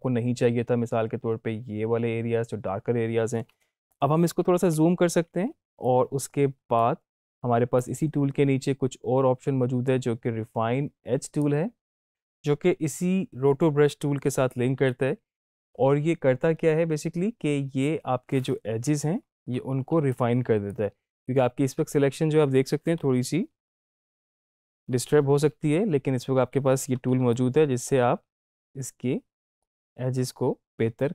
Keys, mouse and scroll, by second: 4.1 ctrl+Num_Lock, 4.3 ctrl+=, 5.5 space, 5.9 click, 6.0-7.1 space, 7.8-14.7 drag, 15.6 space, 18.9 space, 19.1 ctrl+=, 20.1-20.7 click, 20.5 space, 23.1 ctrl+=, 23.7 space, 23.7-24.3 click, 24.1 space, 24.9 ctrl+-, 27.3-28.6 ctrl+drag.